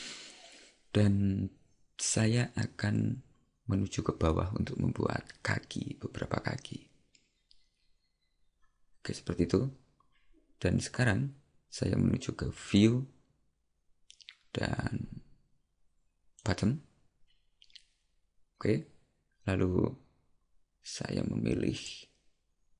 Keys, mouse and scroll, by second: 12.7 click, 21.9 click.